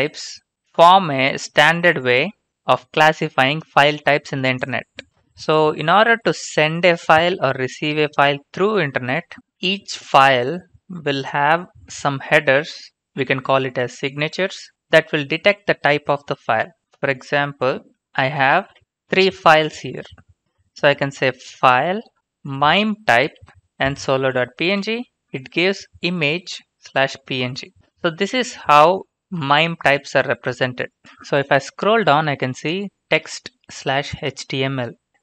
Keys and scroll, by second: 18.0-19.3 typing, 21.1-22.4 typing, 23.2 Right, 24.7 Return.